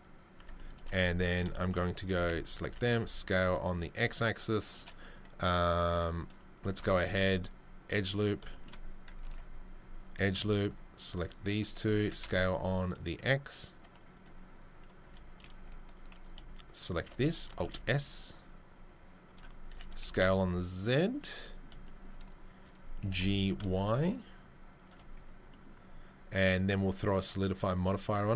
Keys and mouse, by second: 0.3 Tab, 2.1 a, 2.6 s, 7.1 ctrl+r, 9.2 ctrl+r, 12.0 s, 15.5 typing, 17.5 alt+s, 19.7 s, 23.0 g, 26.8 click, 26.9-27.7 middle drag, 27.7 click, 27.8-28.3 middle drag.